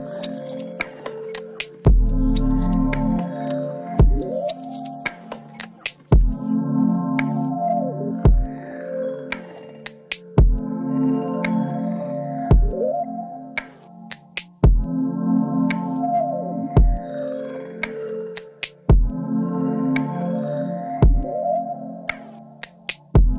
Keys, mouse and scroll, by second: 0.9 click, 1.4 ctrl+r, 7.9 click, 8.1-11.4 middle drag, 10.2 ctrl+r, 11.4 click, 11.6 middle click, 12.1 s, 14.3 middle click, 15.0-16.3 drag, 17.5-19.8 middle drag, 19.3 x, 19.8-21.5 drag, 21.5 middle click, 22.2 click, 22.3 scroll up 2.